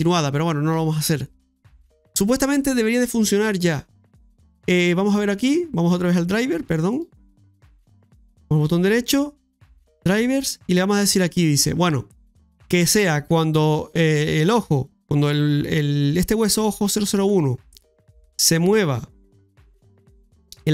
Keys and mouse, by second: 2.1 right click, 6.9 right click, 8.5-15.7 right drag, 18.0-20.7 right drag.